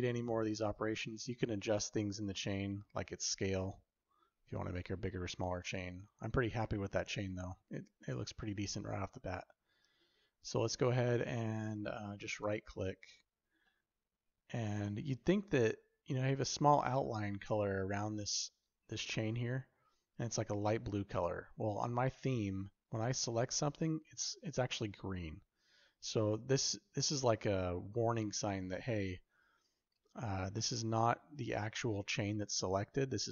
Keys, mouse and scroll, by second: 13.5-15.5 shift+middle drag, 16.1 drag.